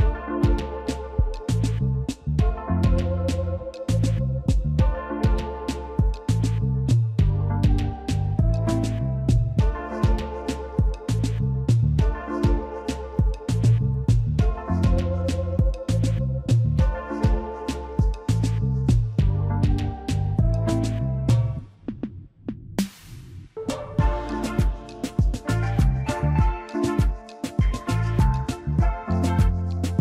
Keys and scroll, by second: 0.0 a, 15.2 g.